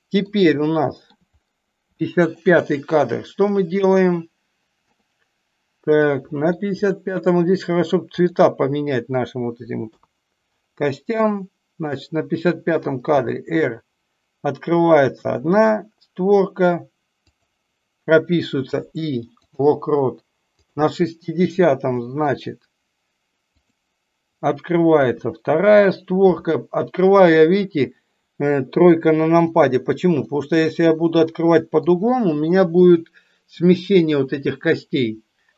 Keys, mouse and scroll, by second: 0.5-1.0 shift+middle drag, 2.0 shift+middle click, 3.5 middle click, 4.9 middle click, 6.0 middle click, 20.5 click, 22.0 middle drag, 23.5 click, 30.1-31.6 middle drag.